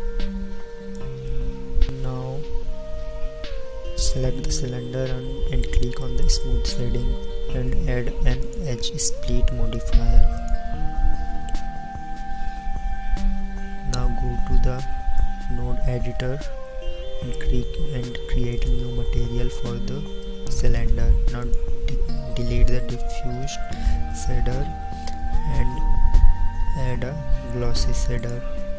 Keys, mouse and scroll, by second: 1.9-3.3 middle drag, 3.3 t, 7.2 t, 15.2 middle click.